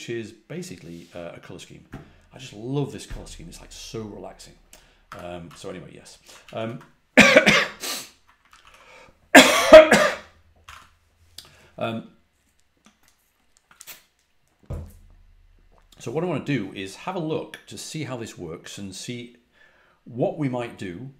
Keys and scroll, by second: 4.7-5.9 typing, 6.3 ctrl+a, 6.5 ctrl+h, 8.4 ctrl+a, 8.5 ctrl+h, 10.3-11.1 typing.